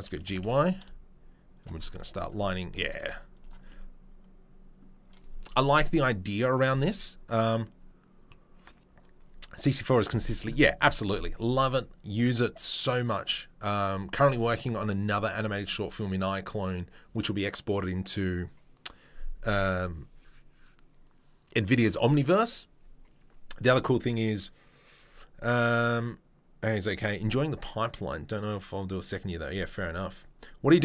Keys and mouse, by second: 0.3 g, 1.9-3.4 middle drag, 1.9 z, 3.0 Tab, 3.4-30.4 right drag, 30.4-30.8 middle drag.